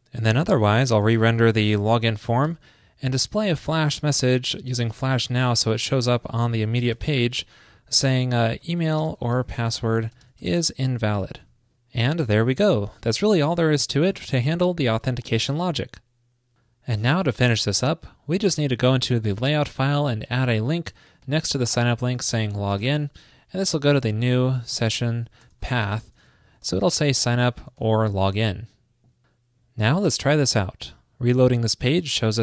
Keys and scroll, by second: 11.5 super+s, 20.5 ctrl+shift+d, 23.5 alt+Right, 23.6 alt+Right, 23.8 alt+shift+Left, 26.4 super+Right, 27.8 super+s.